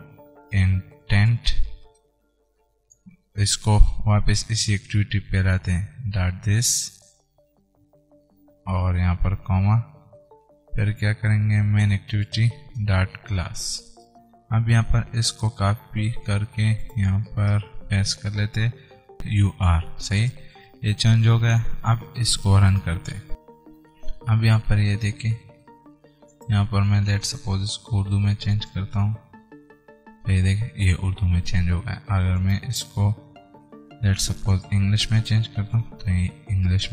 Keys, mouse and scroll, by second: 14.3-16.0 drag, 16.0 ctrl+c, 17.1 click, 18.0 Return, 18.1 ctrl+v, 19.2 click, 19.5 r, 20.5 click, 23.0-25.5 drag.